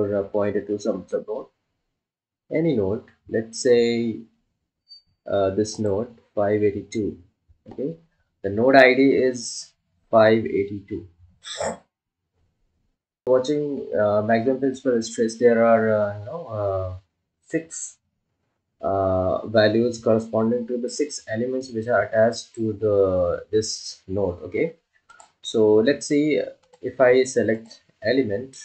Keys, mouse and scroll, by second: 6.6 click, 27.8 click.